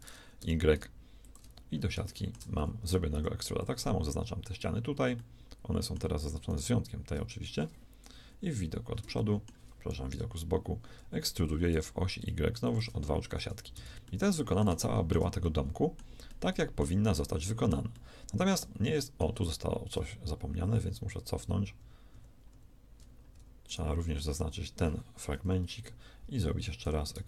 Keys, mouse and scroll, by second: 2.5 shift+a, 3.1 b, 8.1 KP_1, 10.1 KP_3, 11.7 e, 13.7 z, 14.1 middle click, 20.3 ctrl+z, 20.7 ctrl+z, 21.4 ctrl+z, 21.7 ctrl+z, 22.1 ctrl+z, 22.5 ctrl+z, 25.5 KP_3, 26.7 e.